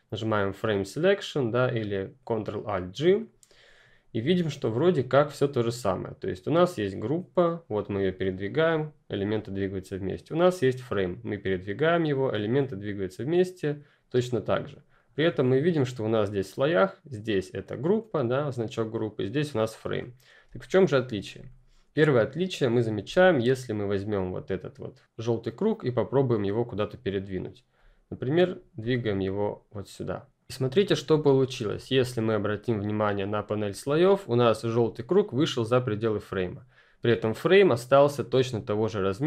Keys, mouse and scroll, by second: 3.1 click, 6.7 click, 16.6 click, 19.9 click, 20.4 space, 20.6 click, 20.9 space, 21.4 click, 36.2 F10, 36.3 click.